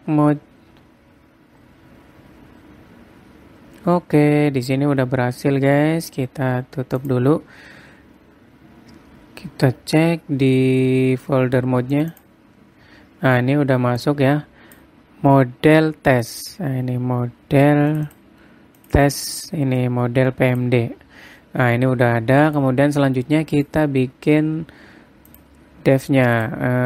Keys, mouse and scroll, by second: 0.3 click.